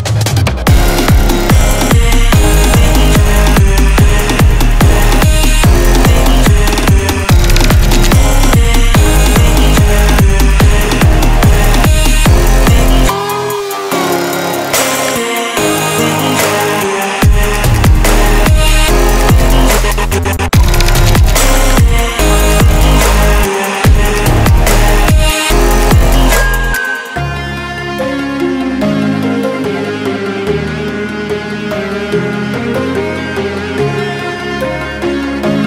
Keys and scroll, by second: 20.6 Delete, 21.7 Delete.